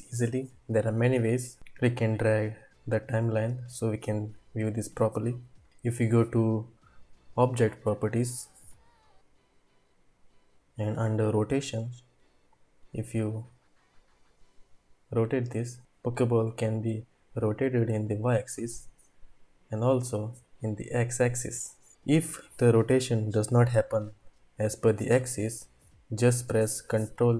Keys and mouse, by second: 1.8-4.1 drag, 8.0 click, 12.6-15.9 drag, 16.9-18.4 drag, 18.7-21.7 drag, 21.9 ctrl+z.